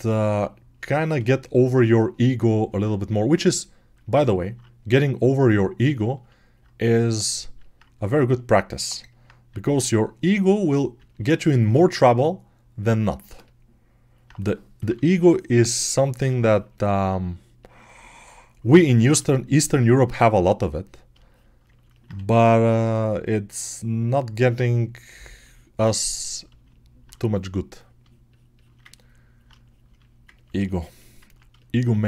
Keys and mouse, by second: 14.7 6, 22.0 1, 31.6-32.0 alt+right drag.